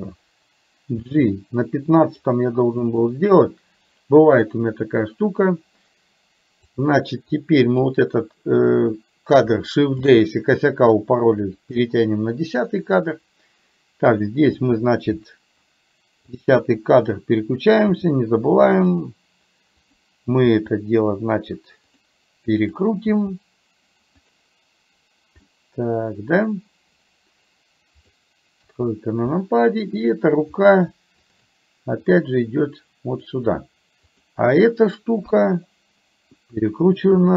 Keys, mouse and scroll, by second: 1.1 g, 2.9 click, 6.7 click, 7.4 click, 10.1 shift+d, 16.3 click, 18.1 r, 20.6 r, 22.7 click, 23.2 r, 25.6-28.2 middle drag, 28.7 KP_3, 31.3 shift+click, 32.1-33.4 drag, 35.3 KP_3, 37.2 r.